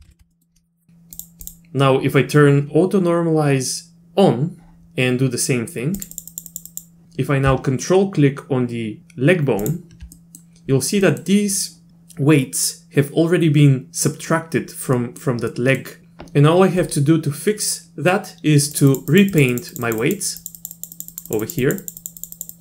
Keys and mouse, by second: 0.0 ctrl+z, 0.1 ctrl+z, 0.3 middle click, 0.9 ctrl+z, 1.2 click, 6.0 click, 6.1 click, 6.3 click, 6.5 click, 6.7 click, 10.1 middle click, 11.1 middle click, 15.0 middle click, 15.5 middle click, 18.7 click, 18.9 click, 19.1 click, 19.3 click, 19.5 click, 19.7 click, 19.8 click, 20.0 click, 20.4 click, 20.6 click, 20.8 click, 20.9 click, 21.1 click, 21.3 click, 21.4 click, 21.6 click, 21.8 click, 22.0 click, 22.2 click, 22.3 click, 22.5 click.